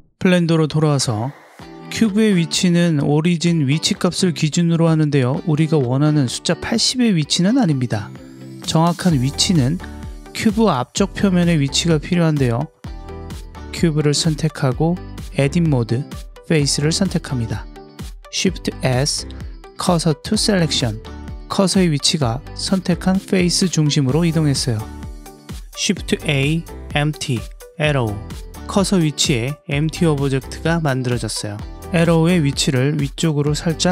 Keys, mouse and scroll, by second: 0.0 click, 1.9 KP_Decimal, 2.5-3.9 middle drag, 4.9 click, 5.3 middle click, 5.4-6.2 middle drag, 6.4-8.0 middle drag, 8.7 click, 13.8 Tab, 15.2 3, 15.7 click, 16.5 middle click, 17.9 shift+s, 22.4 middle click, 23.1 middle click, 24.0 middle click, 24.2 middle click, 24.5-25.5 middle drag, 25.5 Tab, 26.1 shift+a, 29.7-32.1 middle drag, 32.7 click.